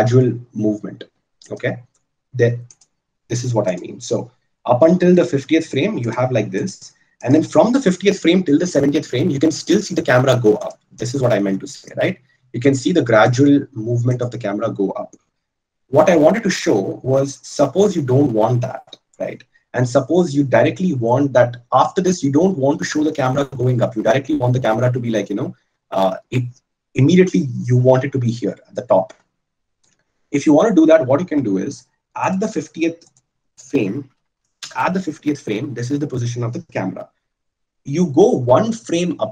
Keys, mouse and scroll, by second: 4.0 click, 8.9-18.2 drag, 16.5 ctrl+z, 18.2 ctrl+z.